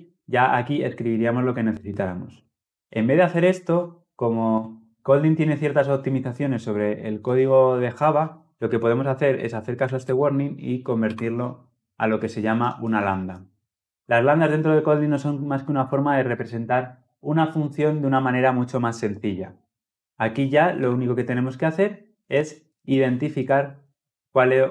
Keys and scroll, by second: 9.8 alt+Return.